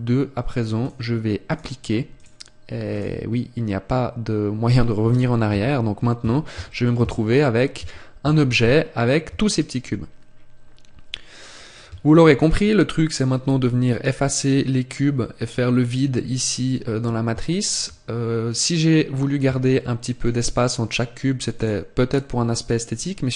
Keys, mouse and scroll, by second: 0.7 click, 1.4 click, 6.9 a, 7.7 Tab, 8.5 a, 10.5 scroll up 1, 12.0 shift+middle click, 16.9-17.3 scroll up 1, 17.3 shift+middle click, 18.0-18.5 scroll up 1, 18.9 scroll up 1, 19.6 shift+middle click, 21.5 right click.